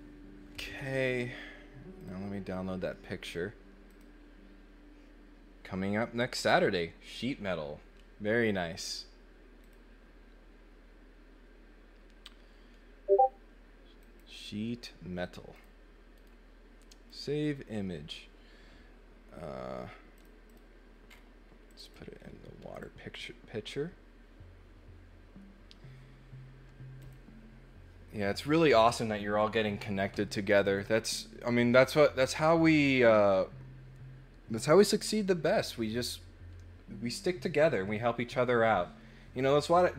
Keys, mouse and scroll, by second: 2.0 click, 3.8 click, 9.6 click, 14.0 click, 15.5 click, 16.2 right click, 16.8 click, 20.1 click, 20.4 click, 21.0 middle click, 21.0 scroll up 2, 21.6 click, 22.7 click, 26.9 click, 30.6 click.